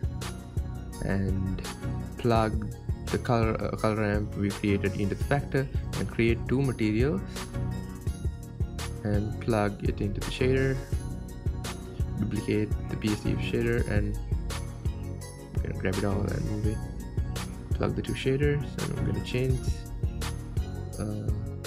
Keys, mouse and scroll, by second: 5.5 ctrl+shift+click, 12.0 click, 13.8-15.8 drag, 15.8 shift+d, 21.0 click.